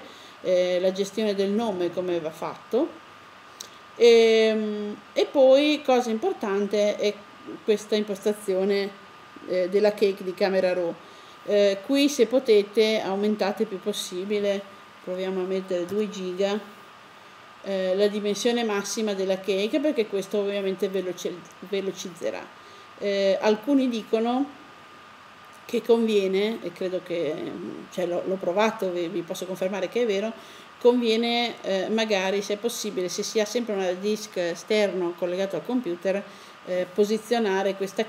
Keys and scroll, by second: 15.7 2.